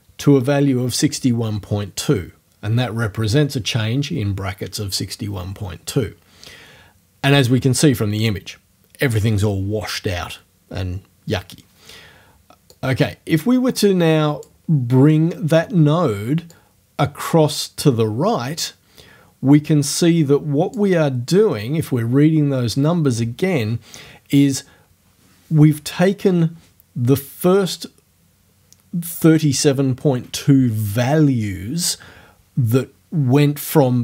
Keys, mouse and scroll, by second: 12.8-14.6 drag, 16.6-21.0 drag, 21.0-27.4 middle drag.